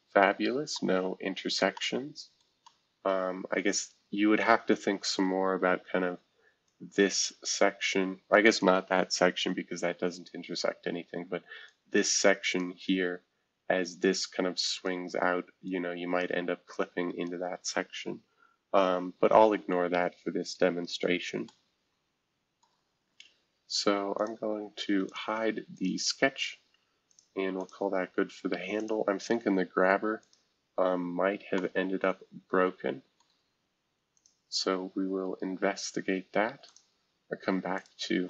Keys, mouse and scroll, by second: 1.2-1.7 scroll up 1, 2.4 middle click, 3.1 middle click, 3.3 scroll down 2, 3.7-4.3 scroll up 4, 5.8 F2, 6.6-9.2 drag, 9.2 shift+F2, 11.7-14.1 drag, 18.8 shift+F2, 19.4 F2, 19.9-21.1 scroll down 1, 21.1-22.6 scroll up 1, 21.4-24.1 middle drag, 24.2 click, 25.1 click, 25.7 click, 27.1 click, 27.6 click, 28.7 click, 29.8-30.2 scroll down 1, 30.2 click, 30.7-31.5 scroll up 1, 31.5-34.1 middle drag, 34.1 click, 34.8-35.5 scroll down 1, 36.6-38.2 drag, 36.9 space.